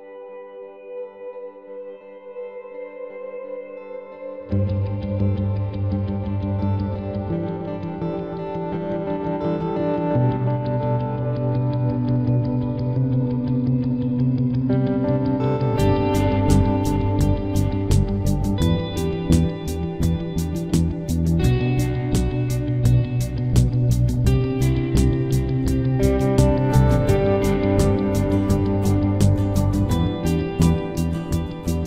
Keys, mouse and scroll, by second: 6.9 right click, 7.1-9.6 middle drag, 8.1 c, 11.8 middle click, 12.6-16.8 drag, 13.6 c, 20.5-22.1 right drag, 22.1-24.5 middle drag, 22.9 c, 25.7-28.5 middle drag, 27.7 c, 28.9 c, 30.4 ctrl+s.